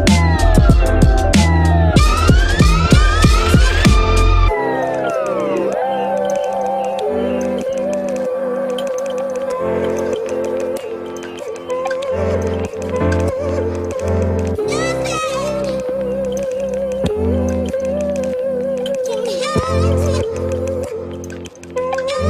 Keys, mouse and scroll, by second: 12.9 space, 15.2 space, 16.9 space, 17.1 space.